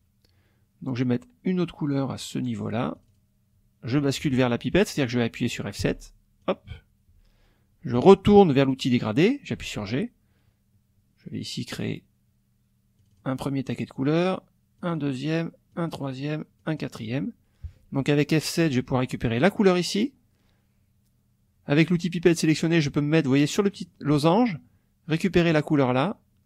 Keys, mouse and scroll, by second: 3.0 click, 5.8 F7, 6.4 click, 9.6 g, 13.0 click, 14.8 click, 15.7 click, 16.6 click, 18.6 F7, 19.4 click, 23.6 click, 25.1 click.